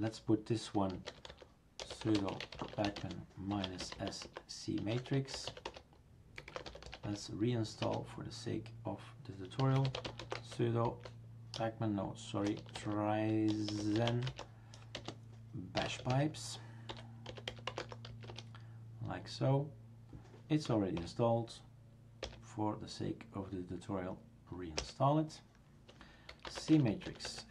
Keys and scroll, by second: 0.7-7.3 typing, 7.8 Return, 9.4-19.6 typing, 20.7 typing, 21.0 Return, 22.2 Return, 24.8 Return, 26.1-27.5 typing.